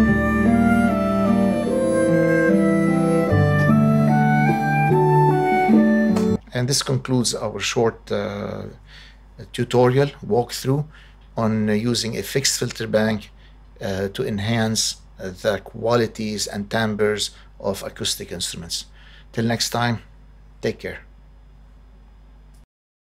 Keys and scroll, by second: 6.1 space.